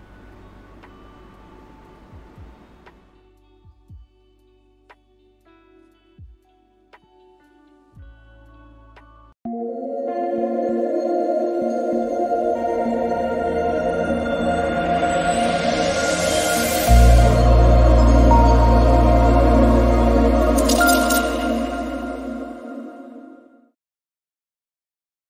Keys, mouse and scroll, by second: 0.6-2.0 alt+right drag, 2.0 f.